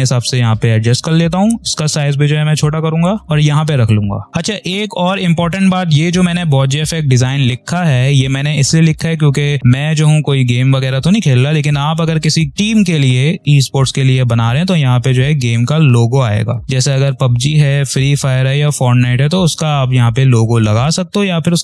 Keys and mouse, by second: 3.2-4.3 drag.